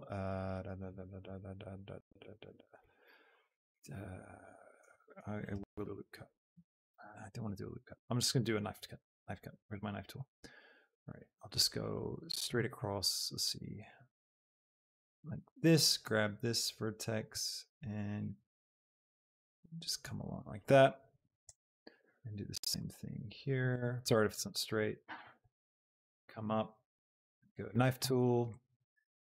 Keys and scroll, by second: 7.0 Escape, 7.0 ctrl+r, 24.2 Return.